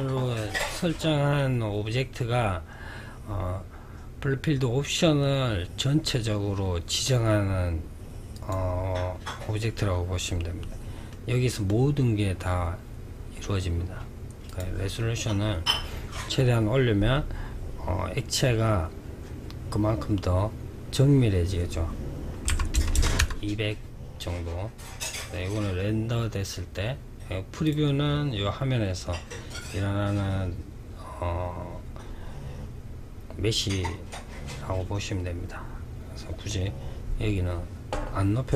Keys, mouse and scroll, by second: 7.7 click, 10.4-13.5 middle drag, 13.8-16.8 drag, 22.2 KP_0, 26.9-30.0 drag.